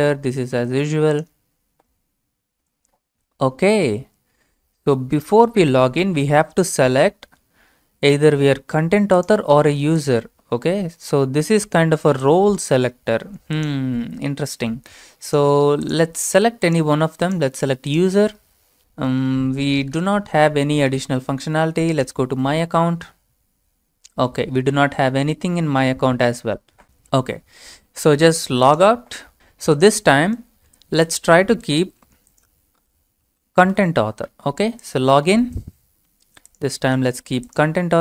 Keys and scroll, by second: 0.0-1.4 typing, 31.8 ctrl+v, 32.9-34.2 typing.